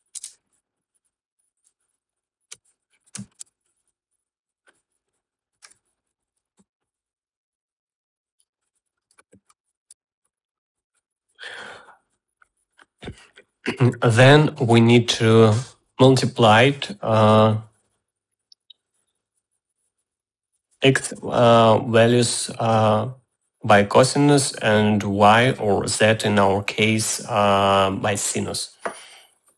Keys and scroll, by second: 0.0-0.9 typing, 1.1 Return, 3.0-4.1 typing, 5.9-7.5 typing, 9.3-11.3 typing.